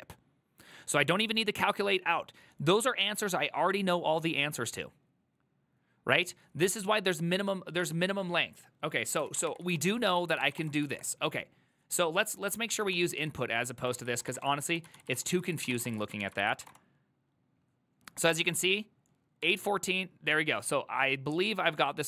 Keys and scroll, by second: 9.6-11.1 typing, 9.9 ctrl+c, 10.0 ctrl+c, 10.2 ctrl+c, 12.7-16.4 typing, 16.5 ctrl+c, 16.7 Up, 16.8 Return, 19.7 alt++.